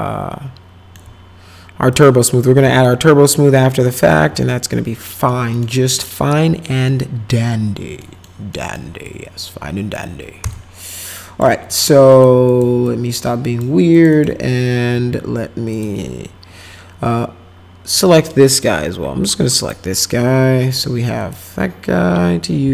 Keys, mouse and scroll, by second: 1.9 click, 2.8-4.1 alt+middle drag, 5.3 middle click, 6.0 middle click, 8.0 middle click, 8.5 middle click, 9.1 click, 10.5 shift+click, 11.7 right click, 12.1 click, 12.5 click, 12.9 click, 13.9 click, 14.1 click, 15.7 click, 17.9 click, 19.6 click, 21.2 click.